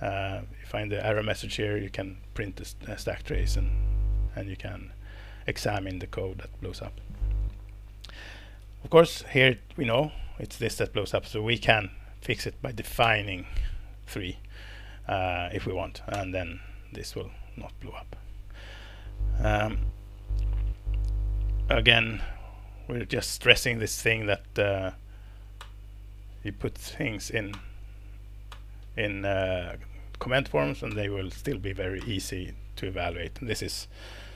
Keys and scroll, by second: 8.6 Escape, 9.8 Escape, 13.0 alt+Return, 16.1 ctrl+Return, 17.4 Escape, 25.6 alt+Return, 27.1 Down, 27.5 alt+Return, 28.5 alt+Return, 29.7 Down, 29.8 Down, 29.9 Down, 30.0 Down, 30.5 Down, 30.9 alt+Return, 32.0 alt+Return.